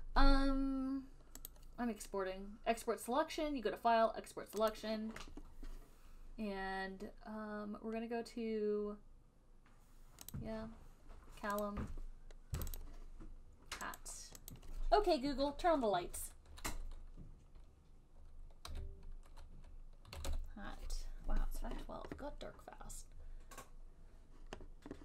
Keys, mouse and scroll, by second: 1.8 click, 5.0 click, 10.7 click, 12.0 click, 12.9 click, 13.1 click, 14.3 click, 14.8 click, 19.0 h, 20.3-21.4 typing.